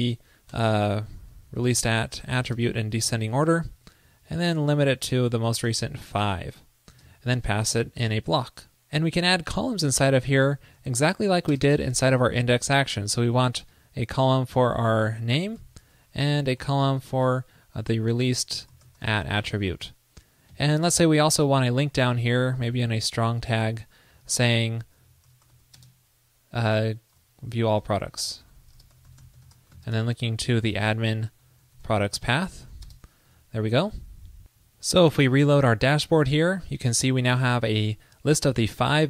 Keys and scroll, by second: 3.8 super+Right, 16.0 super+Return, 33.4 super+Right.